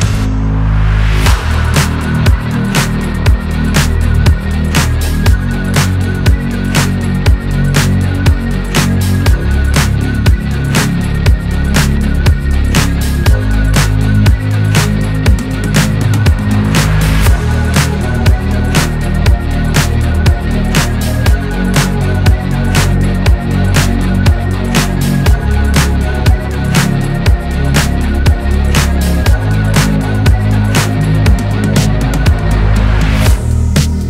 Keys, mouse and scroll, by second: 1.5-2.6 drag, 2.6-3.5 middle drag, 3.5-5.0 drag, 5.0 scroll down 2, 5.1 middle click, 5.7-6.7 scroll up 2, 6.7 click, 7.5-8.9 middle drag, 8.9 click, 9.6 scroll down 4, 9.7-10.9 middle drag, 10.9-11.6 scroll up 2, 11.6 /, 11.9 scroll down 1, 12.1 middle click, 12.3 drag, 12.6-12.9 middle drag, 12.9-13.2 scroll up 1, 13.2-13.6 middle drag, 13.6 scroll down 2, 13.7 middle click, 13.9 scroll up 1, 14.1 middle drag, 14.4-19.5 drag, 19.5-20.1 scroll up 3, 20.1-21.4 drag, 22.2-23.0 middle drag, 23.0-23.4 scroll down 3, 23.4 drag, 23.5 middle click, 24.4 click, 24.6 scroll down 2, 24.9 middle click, 25.7-28.1 drag, 28.2-30.1 middle drag, 30.1 click, 31.2-32.0 scroll up 4, 31.5 middle click, 32.0 middle click, 32.3 scroll down 1, 32.6 middle drag, 32.9-33.5 scroll up 1.